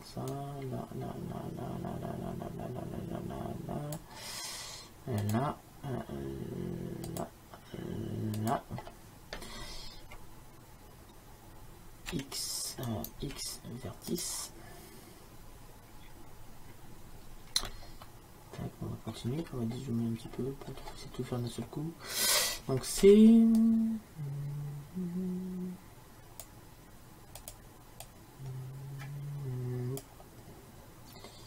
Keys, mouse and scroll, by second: 13.3 x, 18.3 middle click, 20.1-24.0 middle drag, 23.1 c.